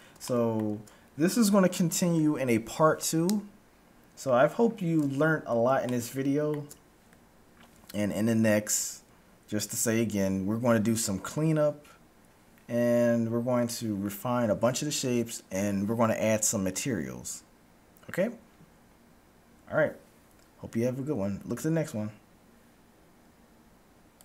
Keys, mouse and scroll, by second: 5.8-7.8 middle drag.